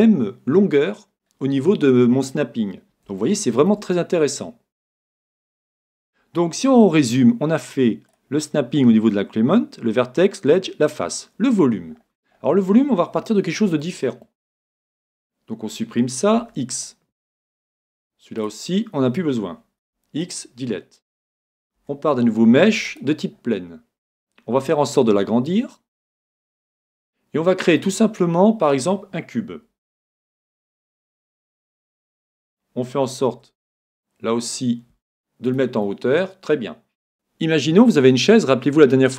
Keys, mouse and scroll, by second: 3.2-6.9 middle drag, 8.1-10.1 drag, 11.9-12.6 scroll down 1, 12.6-13.2 scroll down 1, 13.2 scroll up 1, 13.5-15.6 middle drag, 15.1 Tab, 16.5 x, 17.3-18.4 middle drag, 18.4 right click, 19.8 x, 20.9-22.9 middle drag, 23.3-25.4 middle drag, 24.6 s, 26.7-28.4 drag, 27.0-30.1 middle drag, 33.3 g, 34.3 g, 35.6-37.1 drag, 35.9-37.1 middle drag.